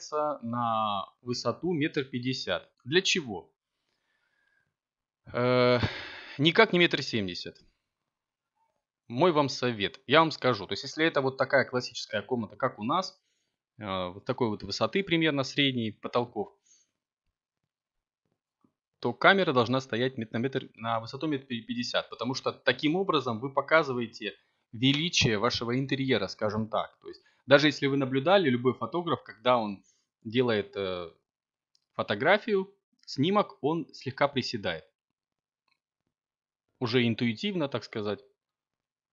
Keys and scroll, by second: 21.4 0, 23.3 Tab, 27.0 9, 27.2 0, 28.0 Tab, 32.0 0, 32.9 Return, 35.2 7.